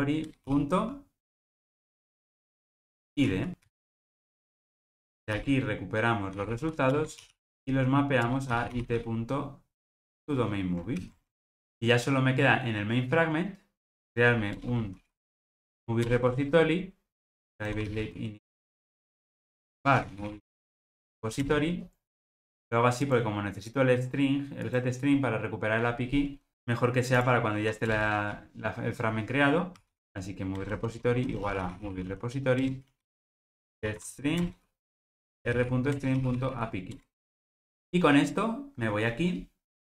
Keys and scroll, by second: 4.1 ctrl+alt+o, 7.0 Return, 11.0 alt+super+l, 11.4 ctrl+alt+o, 16.1 Return, 30.7 Return, 37.4 Return, 37.7 ctrl+alt+o.